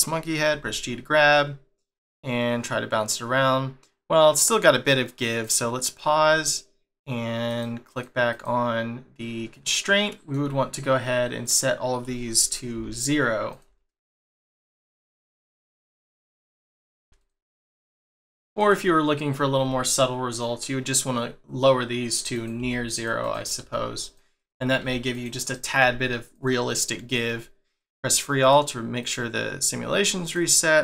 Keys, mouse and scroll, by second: 0.5 g, 5.3 click, 5.8 click, 7.5 click, 7.9 click, 8.3 click, 9.8 scroll up 1, 10.2 shift+middle click, 11.4 click, 13.5 click, 14.4 click, 15.7 click, 16.8 click, 17.8 click, 22.3 click, 23.2 click, 24.4 click, 25.4 click, 27.8 click, 28.4 click, 29.0 click, 30.2 click.